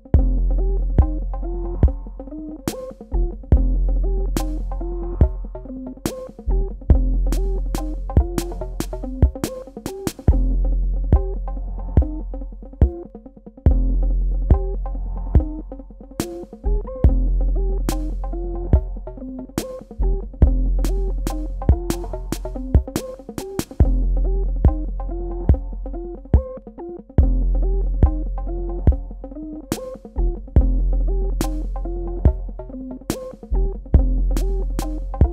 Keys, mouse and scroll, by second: 1.8 click, 3.4 Tab, 5.8 click, 7.6 Tab, 9.2 click, 11.6 click, 16.1 click, 22.0 Tab, 23.2 click, 31.5 click.